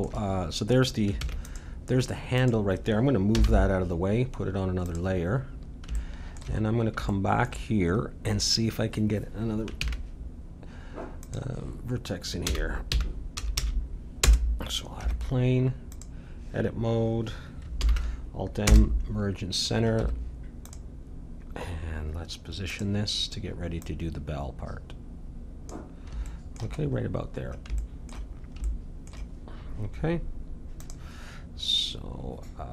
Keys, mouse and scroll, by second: 1.2 ctrl+s, 2.4-4.3 drag, 3.3 m, 5.9-9.8 middle drag, 9.8 shift+a, 12.4 r, 15.0 Tab, 17.8 alt+m, 20.0 Tab, 22.7-25.6 drag, 26.3-30.7 middle drag, 30.7-32.7 drag.